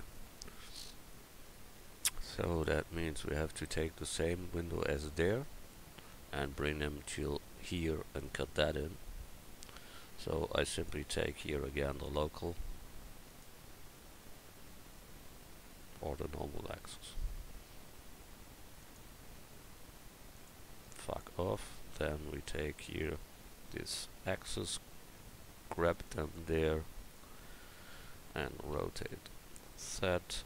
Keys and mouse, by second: 5.3-8.2 drag, 10.7 click, 20.4-22.5 drag, 22.5 KP_7, 24.6 g, 28.7 r.